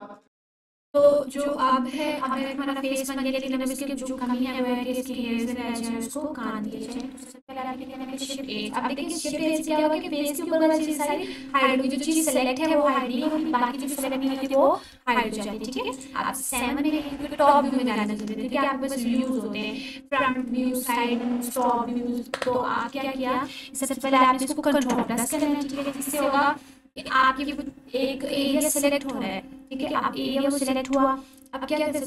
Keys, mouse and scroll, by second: 0.7 alt+q, 2.3 click, 7.7 click, 8.2 shift+h, 9.3 click, 10.9 7, 14.3 Tab, 15.9-18.1 drag, 22.9 ctrl+=, 29.9 1.